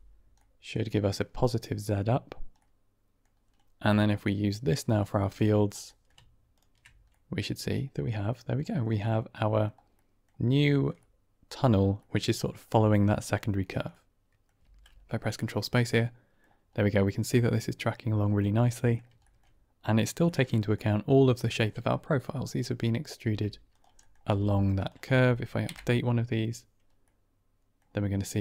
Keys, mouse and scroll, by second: 0.3-0.6 middle drag, 2.5 middle click, 4.1-5.3 drag, 5.9 middle click, 7.0-8.2 middle drag, 8.3 middle drag, 8.9-9.6 middle drag, 9.9 middle drag, 10.6 shift+middle click, 10.9-11.6 middle drag, 11.9-12.5 middle drag, 13.8-14.3 middle drag, 14.6 ctrl+space, 15.3-16.3 middle drag, 16.7 middle click, 18.3-18.8 drag, 19.1 shift+drag, 20.1 shift+middle drag, 20.4 middle drag, 22.6 click, 23.1 Tab, 23.6 click, 23.9 middle click, 24.2 g, 24.7 click, 25.6 Right, 26.9 middle click, 28.3 click.